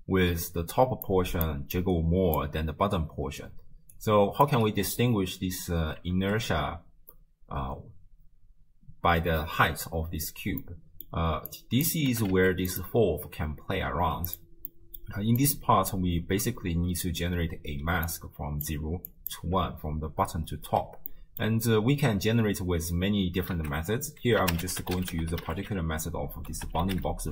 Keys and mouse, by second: 0.3-4.0 d, 1.1 click, 1.8 click, 4.0 click, 4.5 d, 5.0 d, 6.1 shift+space, 10.7 middle click, 11.5 click, 12.1 g, 14.3 click, 14.7 middle click, 15.4 click, 17.8-19.1 d, 18.1-19.1 drag, 19.3 d, 19.4 d, 20.0 d, 21.1 click, 23.6 ctrl+a.